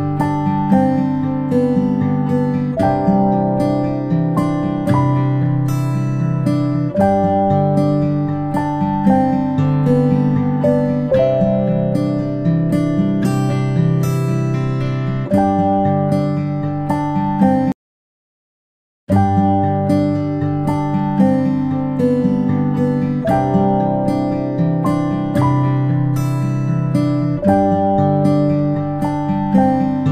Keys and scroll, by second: 2.3 ctrl+p, 13.0 ctrl+space, 13.2 ctrl+space, 13.8 p.